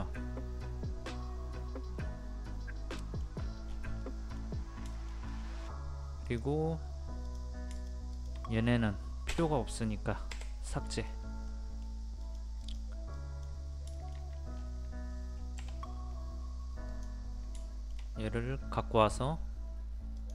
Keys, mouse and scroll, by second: 3.3-3.6 scroll down 1, 3.7-4.0 scroll up 1, 4.0 middle click, 4.6 scroll up 1, 4.9 shift+middle click, 6.3 click, 7.7 shift+click, 9.3 Return, 10.3 Delete, 10.7 middle click, 11.1-11.5 scroll down 1, 11.5 middle click, 12.2 click, 13.9 shift+middle click, 14.5-15.6 scroll up 1, 15.6 m, 16.9 click, 17.6-18.8 shift+middle drag, 20.1 click.